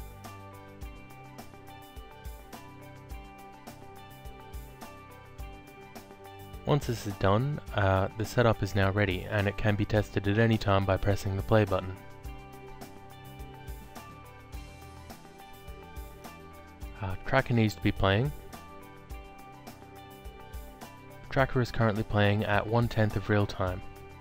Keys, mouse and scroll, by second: 0.2 ctrl+click, 2.6 ctrl+click, 4.4 click, 5.4 ctrl+click, 6.7 click, 9.4 alt+middle click, 10.7 alt+click, 12.7 click, 15.9 click, 17.2 click, 21.9 alt+click.